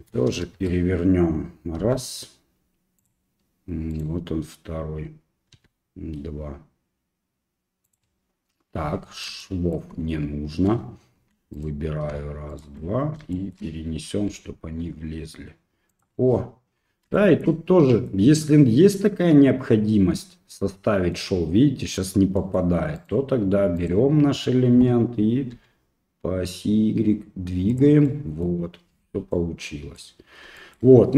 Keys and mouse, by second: 1.8 g, 3.9 right click, 5.5 g, 9.4 shift+middle click, 11.5 right click, 12.5 shift+right click, 13.3 shift+middle click, 14.3 g, 17.2 shift+middle click, 17.9 middle click, 20.9 middle click, 22.5 middle click, 23.0 right click, 25.5 g, 28.1 middle click, 29.3 middle click, 30.6 shift+middle click.